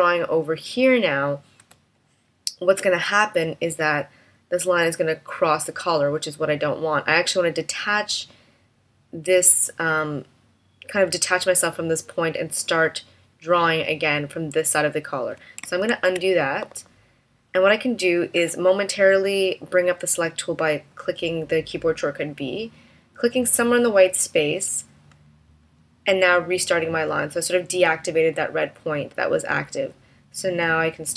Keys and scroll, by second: 1.5 space, 15.4 super+z, 15.6 super+z, 21.8 v.